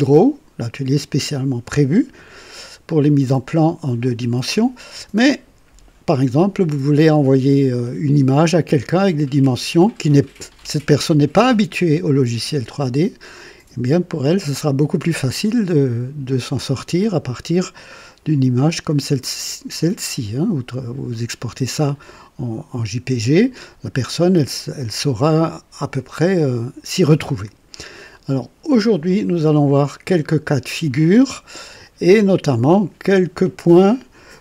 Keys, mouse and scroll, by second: 18.0-21.3 drag, 21.9-23.2 right drag, 25.5-27.2 drag.